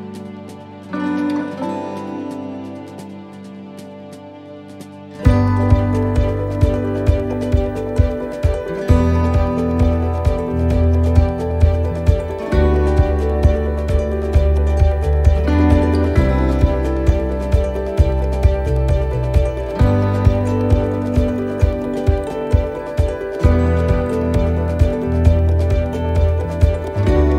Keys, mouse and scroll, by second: 0.3 click, 6.0 shift+d, 7.0 click, 10.7 click, 13.2 shift+right click, 15.2 click, 25.2 click.